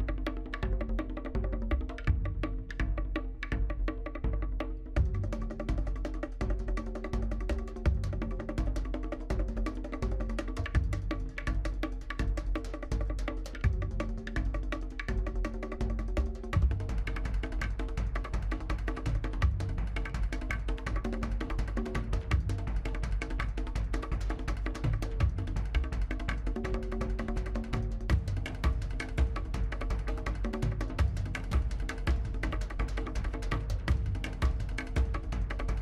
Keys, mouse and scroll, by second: 0.3 middle click, 0.7 click, 1.1 middle click, 1.3-1.9 scroll up 5, 1.4 shift+middle click, 1.7 shift+middle drag, 1.9 shift+middle drag, 2.1 click, 3.0 s, 3.7 scroll down 2, 3.7-4.4 middle drag, 4.4 s, 4.9 scroll down 1, 5.0-5.3 middle drag, 5.3 scroll up 3, 5.4 shift+middle click, 7.2 scroll down 2, 7.2 middle drag, 7.5 scroll up 2, 7.6-8.3 shift+middle drag, 8.3 scroll down 1, 8.4-9.0 shift+middle drag, 9.0 scroll down 1, 9.0 shift+middle drag, 9.3 scroll up 2, 9.4-10.0 shift+middle drag, 10.0 s, 10.4 scroll down 2, 10.5 middle click, 10.7-11.0 scroll up 4, 10.8 middle drag, 11.0 shift+middle click, 11.2 click, 11.3 scroll down 1, 11.3 middle click, 11.4 scroll up 1, 11.5 shift+middle drag, 11.7 click, 11.8 scroll down 1, 11.9 shift+middle click, 12.3-12.9 drag, 12.9 scroll down 1, 13.0 middle click, 13.4 click, 13.7 scroll down 1, 13.7 middle click, 13.8 scroll up 2, 13.8 shift+middle click, 13.9 click, 14.1 shift+middle click, 14.5 scroll down 1, 14.6 middle click, 15.2 click, 15.6 scroll down 2, 15.8 middle click, 15.8-16.5 scroll up 6, 15.9 shift+middle drag, 16.2 shift+middle drag, 16.5-17.1 shift+middle drag, 17.1 scroll down 1, 17.4 shift+middle click, 17.5 scroll up 1, 17.5 shift+middle click, 17.7 drag, 17.8-18.6 middle drag, 20.9 g, 21.6 scroll down 2, 21.6 middle drag, 21.9 scroll up 2, 22.0-22.7 middle drag, 23.0-23.4 scroll up 2, 23.1 shift+middle drag, 23.4-23.7 shift+middle drag, 23.7 drag, 23.9-25.1 middle drag, 25.1 scroll up 8, 25.3 shift+middle click, 25.6 scroll down 2, 25.7-26.4 middle drag, 26.5 click, 26.6 middle drag, 26.9 scroll up 3, 27.0 shift+middle click, 27.5-28.3 drag, 28.3 1, 28.5 scroll down 6, 28.7 click, 29.1 Tab, 29.3 scroll up 2, 29.6 shift+middle click, 29.9 shift+z, 30.0 middle click, 30.8 click, 32.8 middle click, 34.2 middle click, 34.5 click, 35.0-35.4 scroll down 2, 35.0 middle click, 35.4 middle click, 35.5 shift+z, 35.6 scroll up 2, 35.7 middle click.